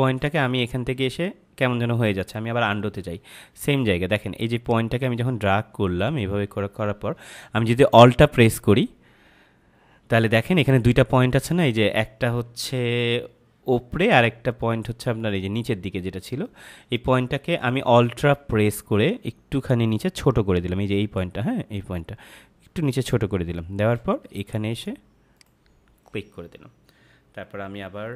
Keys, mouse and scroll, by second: 2.9 z, 4.6 click.